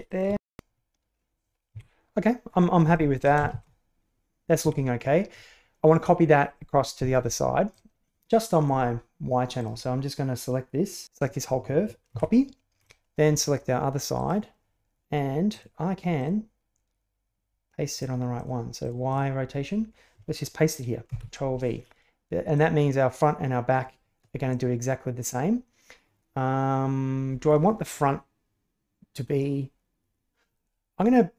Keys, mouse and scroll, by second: 0.0 s, 0.0 click, 0.3 shift+space, 1.7 Escape, 2.8 shift+middle click, 3.4 shift+space, 4.6 Escape, 7.7-8.6 drag, 9.5 click, 11.0 a, 12.0 ctrl+c, 12.8-13.3 middle drag, 14.1 click, 15.4 click, 16.1 click, 17.8 click, 18.3 click, 18.8 drag, 19.0 click, 21.1 ctrl+v, 22.5-27.5 drag.